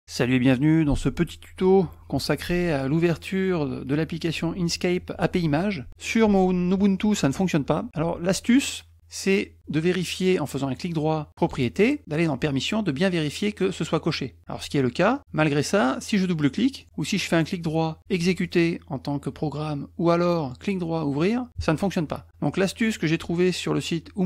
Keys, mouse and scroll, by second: 10.6 right click, 11.4 click, 12.3 click, 15.1 click, 16.8 click, 17.2 right click, 18.4 click, 20.5 right click, 21.2 click.